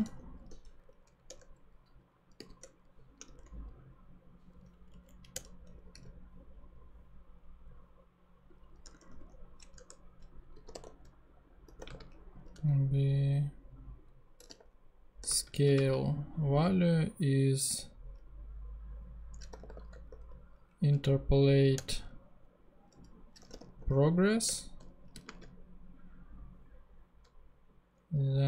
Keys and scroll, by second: 0.0 super+z, 0.4 super+e, 0.7 r, 1.2 Return, 2.4 ,, 2.6 Return, 3.2 shift+e, 5.0 Down, 5.4 Return, 6.0 ,, 8.8 Tab, 9.7-12.6 typing, 14.2-15.7 typing, 19.2-20.5 typing, 21.9 Return, 23.1-24.2 typing, 24.4 Return, 25.3 space.